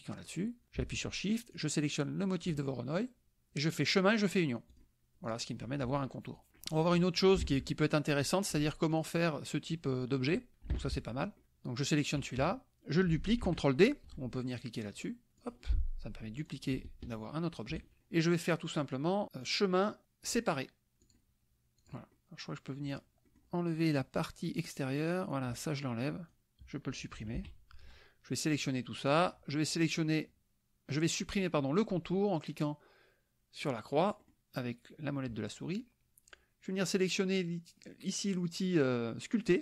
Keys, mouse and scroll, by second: 1.6 shift+click, 3.8-4.4 drag, 4.7 click, 5.2 click, 6.6 click, 7.5 alt+Tab, 8.3 alt+click, 10.8 alt+Tab, 12.4 KP_Subtract, 15.4 click, 16.5-17.9 drag, 19.5 click, 21.0 click, 21.8 click, 22.1 click, 23.4 click, 25.3-26.6 drag, 27.5 Delete, 28.5-29.4 drag, 34.4 click.